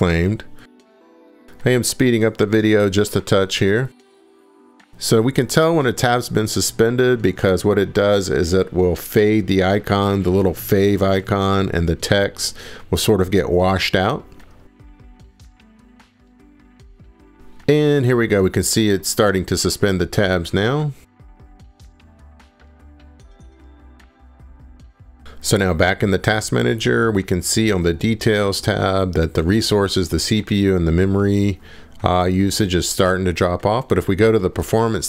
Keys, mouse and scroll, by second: 15.7 click, 20.6-35.0 drag.